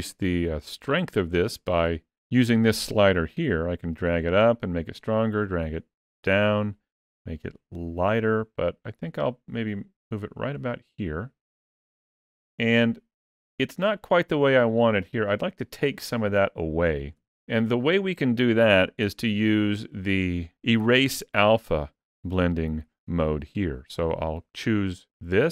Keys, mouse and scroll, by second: 0.6 shift+middle click, 3.0 click, 17.0 f, 20.7 click.